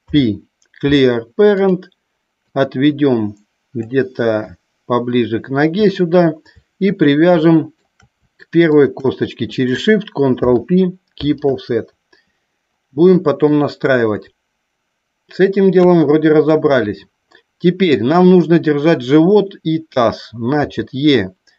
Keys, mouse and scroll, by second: 2.4-3.7 drag, 7.4 shift+middle click, 10.3 ctrl+p, 13.2 shift+middle click, 15.7 KP_1, 18.0 click.